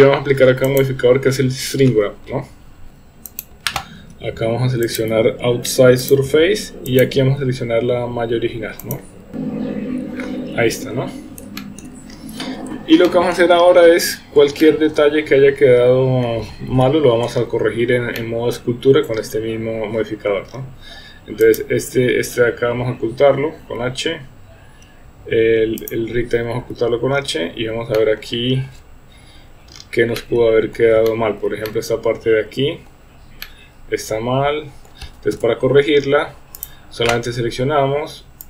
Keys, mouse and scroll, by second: 0.7-3.5 drag, 5.0-6.2 drag, 7.0 click, 11.6 shift+middle drag, 13.0-13.4 shift+middle drag, 14.6-16.3 middle drag, 16.7 KP_1, 18.2-18.6 shift+middle drag, 21.4 click, 23.6 h, 25.8 click, 27.9-28.3 shift+middle drag, 30.2-30.8 middle drag, 31.1-31.4 shift+middle drag, 31.7-32.9 middle drag, 33.4-34.9 middle drag, 35.3 KP_1, 36.5 click.